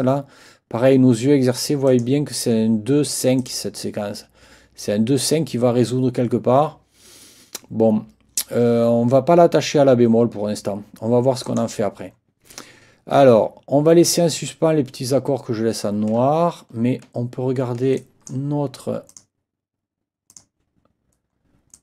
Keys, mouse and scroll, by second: 1.9 click, 3.4 ctrl+click, 5.2 click, 11.4 click, 16.3-17.1 ctrl+scroll down 4, 17.5 ctrl+scroll down 2, 18.0 ctrl+click, 19.1 click, 20.3 click, 21.7 click.